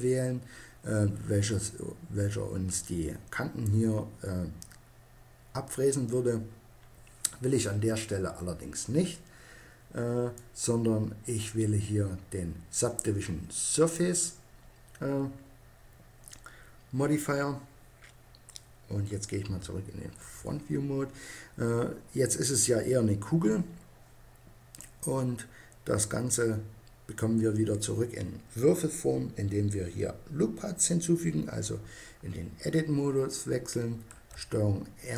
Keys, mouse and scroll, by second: 10.0-11.8 drag, 19.1 KP_1, 20.9-22.3 drag, 24.4-26.2 drag, 33.8 ctrl+r.